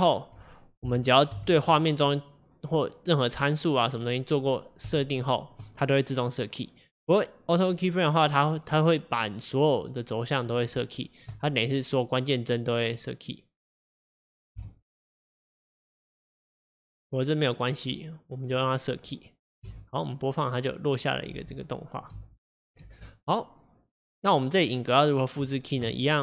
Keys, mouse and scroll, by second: 0.9 g, 11.8-15.4 drag, 17.0-19.7 drag, 19.7 space, 21.5 space, 21.8-22.2 drag, 22.2 space, 23.0 space, 24.2-26.2 drag.